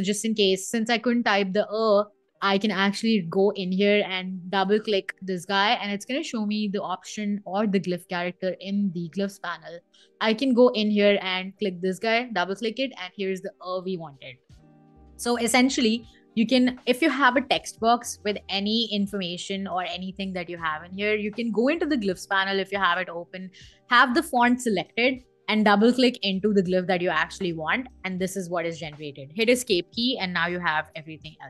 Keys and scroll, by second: 14.3 BackSpace, 27.9 Escape.